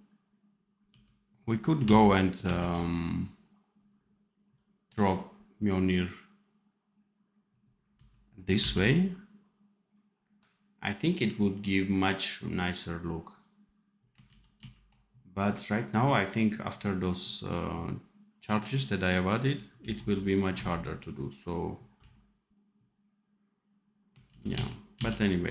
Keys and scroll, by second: 0.8 d, 1.7 c, 2.5 ctrl+z, 7.8 c, 8.5 v, 14.2 ctrl+z, 19.7 c, 20.4 v, 21.9 c, 24.2 ctrl+z.